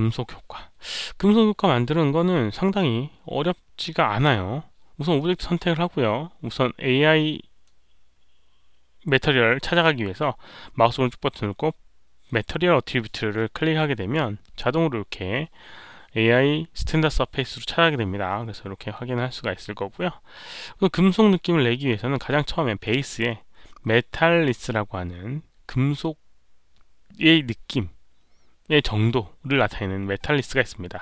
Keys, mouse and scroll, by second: 2.7 alt+middle click, 5.1 click, 5.1 alt+middle click, 5.3 alt+middle click, 7.6-14.1 right drag, 12.5 click.